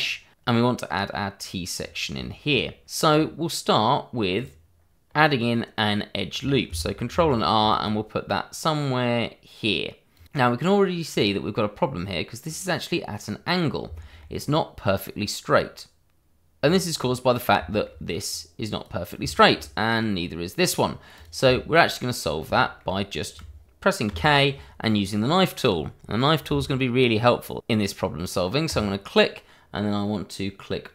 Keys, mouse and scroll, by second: 0.4-1.6 scroll up 1, 2.2 scroll up 1, 2.5 shift+middle click, 4.3 click, 5.3 shift+middle click, 5.3 scroll down 1, 5.5 shift+middle click, 5.8 scroll up 1, 7.3 ctrl+r, 7.8 click, 10.1 click, 10.3-11.0 scroll up 1, 11.1-12.2 scroll down 1, 12.4 scroll up 1, 13.9 shift+middle click, 14.3 scroll up 1, 16.5-16.9 scroll down 1, 16.9-17.5 scroll up 1, 17.7 shift+middle click, 18.2 click, 19.3 shift+middle click, 19.9 click, 21.5 middle click, 22.2 scroll up 1, 22.6 shift+middle click, 24.0 k, 28.6 click.